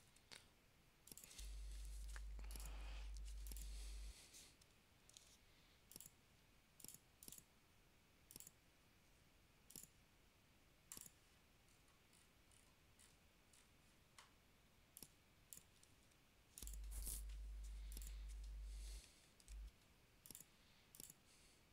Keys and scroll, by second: 0.2 super+x, 5.2 super+v, 16.1 super+x, 19.6 super+v.